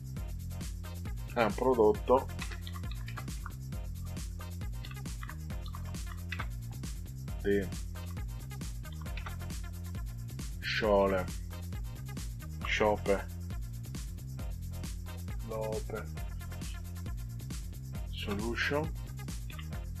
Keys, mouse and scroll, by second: 2.0-6.5 typing, 8.8 i, 9.1 space, 11.0 shift+s, 12.5 ò, 15.0-16.8 typing, 19.4 shift+s.